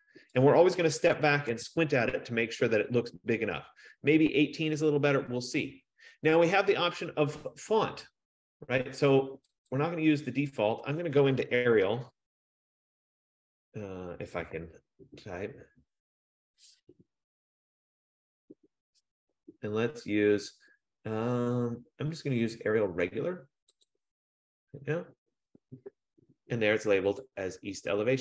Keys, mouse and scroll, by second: 0.6 click, 1.1-3.9 typing, 10.0 click, 11.8-13.4 typing, 14.7 BackSpace, 15.5 BackSpace, 16.4 BackSpace, 18.1 i, 24.1 click, 27.5 click.